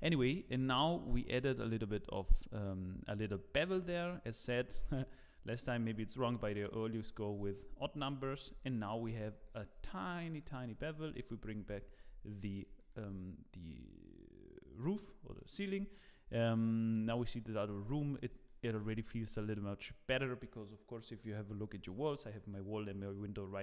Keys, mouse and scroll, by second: 0.0 ctrl+s, 0.0 scroll up 3, 2.8 click, 5.3 shift+click, 5.5 shift+click, 7.9 click, 8.2-8.7 scroll down 5, 8.7 shift+middle click, 9.0 scroll down 2, 9.5 shift+middle click, 9.8 middle click, 10.4 middle click, 10.5 shift+middle click, 11.5 alt+h, 12.0 scroll up 3, 12.3 middle click, 12.8 shift+middle click, 13.1 click, 15.0 scroll down 3, 15.3 shift+middle click, 16.6 middle click, 17.1 shift+middle click, 17.9 shift+middle click, 18.3 middle click, 18.6 scroll up 8.